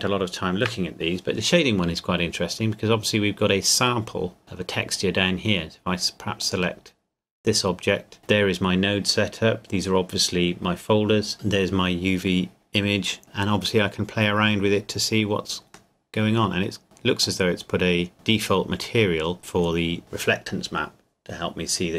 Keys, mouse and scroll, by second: 0.9-3.1 scroll up 1, 6.4 click, 13.8-14.4 scroll up 1, 15.9 middle click, 17.6 scroll up 1, 17.7 scroll down 1, 17.8-18.1 scroll up 1.